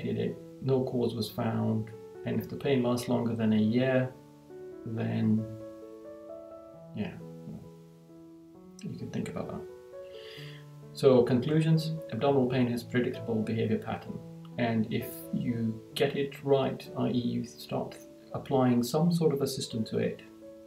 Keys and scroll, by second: 0.9 Right, 3.9 Right, 5.7 Right, 9.6 Right, 11.2 Right.